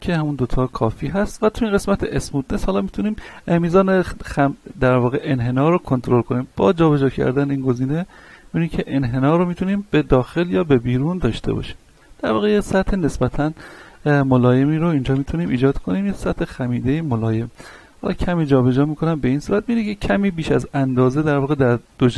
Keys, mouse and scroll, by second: 6.6-16.0 drag, 16.0-16.5 scroll up 1, 17.9-21.4 drag, 21.4 middle click.